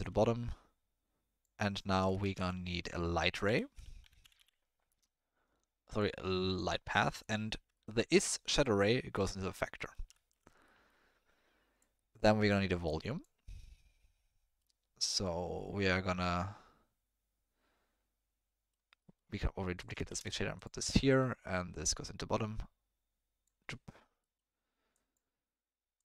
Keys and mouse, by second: 0.1-1.5 drag, 2.0 click, 2.2 shift+a, 7.8 ctrl+middle click, 8.6 click, 9.9 middle click, 10.3 ctrl+middle drag, 10.8 middle click, 11.8 click, 12.8 click, 19.1 middle click, 19.8 click, 20.1 shift+d, 21.1 middle click, 22.0-23.5 drag, 24.2 middle click, 24.9 click, 25.9 click.